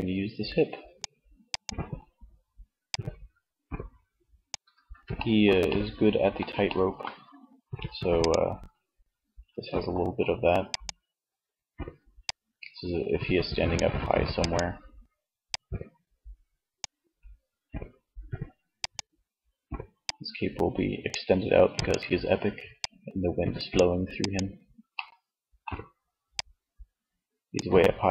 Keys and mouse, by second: 0.6-2.0 drag, 2.0 middle click, 2.5-3.9 drag, 7.3-8.3 middle drag, 8.5 middle click, 9.9-11.2 right drag, 11.4-13.0 drag, 14.6 click, 15.3 click, 16.1-18.0 middle drag, 18.0-19.0 right drag, 19.6-21.0 drag, 21.0 right click, 24.1-25.5 middle drag, 25.5-27.3 drag, 27.5-28.1 middle drag.